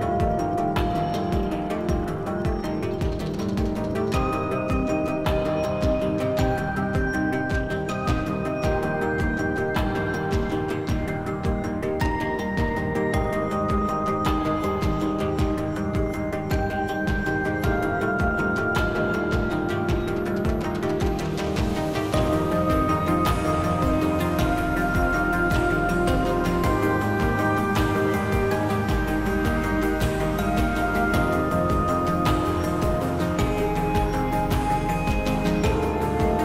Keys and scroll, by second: 11.1 b, 11.5 k, 12.1 c, 14.1 s, 16.4 ctrl+shift+space, 33.8 alt+e.